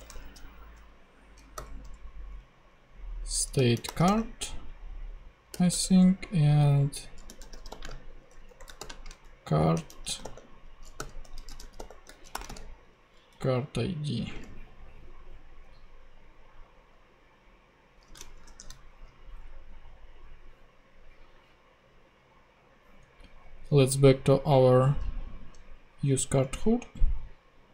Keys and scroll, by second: 0.0-1.5 typing, 3.5 shift+c, 3.8 r, 5.5 ,, 5.7 Return, 7.0-13.5 typing, 18.4 shift+super+p, 26.3 ctrl+Tab.